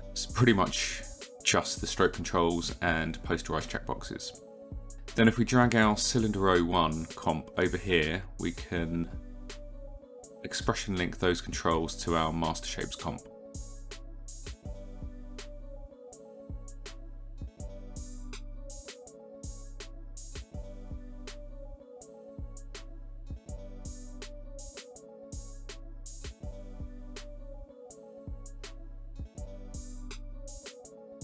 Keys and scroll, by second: 8.4 e, 10.9 e, 22.6 space.